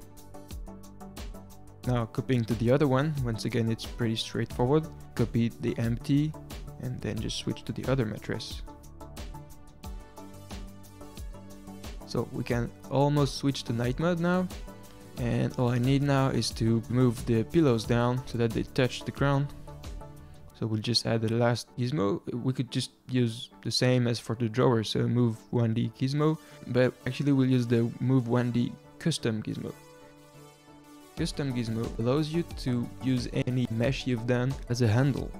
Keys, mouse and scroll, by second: 2.1-4.6 middle drag, 4.6 shift+d, 6.4-7.0 scroll down 2, 7.1 click, 7.5 click, 8.8-9.3 middle drag, 9.3 click, 11.9-12.5 middle drag, 12.5 ctrl+s, 12.5 click, 13.1 click, 14.9 click, 15.5 click, 16.1 g, 18.4 scroll down 1, 18.7-19.9 middle drag, 19.9 shift+s, 21.0 shift+a, 30.1 middle click, 30.8 click.